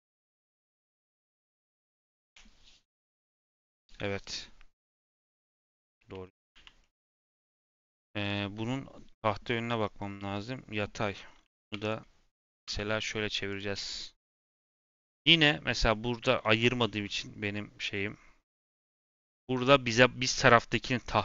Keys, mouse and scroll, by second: 4.8 scroll down 2, 5.0-5.5 middle drag, 5.5 scroll up 2, 5.7 Tab, 6.0 Tab, 6.3 click, 6.5 a, 6.7-7.6 middle drag, 7.6 click, 7.9 click, 8.1 click, 11.1 middle click, 11.3-11.6 scroll up 2, 11.6 3, 11.7 click, 13.4 click, 14.4 l, 15.7-16.7 scroll up 1, 16.7 r, 19.3 r.